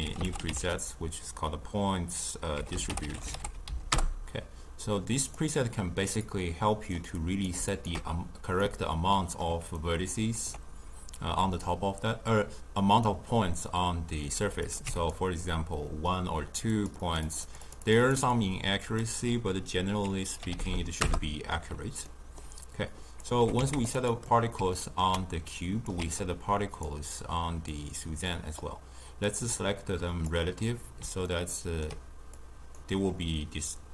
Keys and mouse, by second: 6.9 click, 7.6-9.7 alt+shift+drag, 9.7-14.9 ctrl+middle drag, 14.9-20.9 drag, 20.9 0, 25.9 shift+d, 28.5 click, 29.2-31.3 drag, 31.3-33.9 ctrl+middle drag.